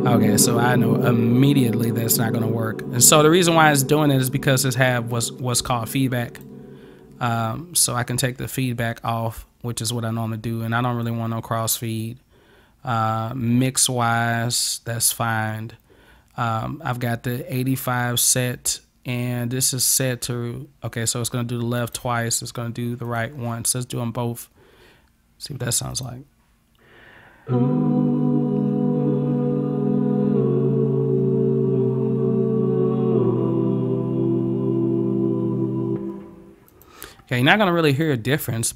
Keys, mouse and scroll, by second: 6.1 click, 11.1 click, 21.9 click, 23.1 click, 26.0 click, 36.7 click, 37.9 click.